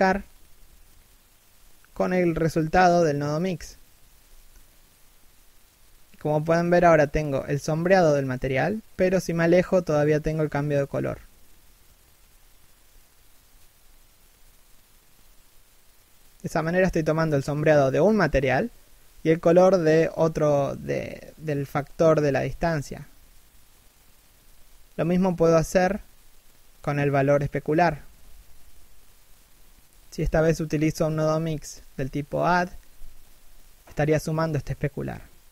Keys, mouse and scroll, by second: 6.5 scroll down 1, 7.6 shift+middle click, 8.3 scroll up 1, 9.4 scroll down 1, 10.3 scroll up 1, 10.8 middle click, 10.9 scroll up 1, 11.5 scroll down 1, 12.0 scroll up 1, 12.6 middle click, 24.4 right click, 24.5 r.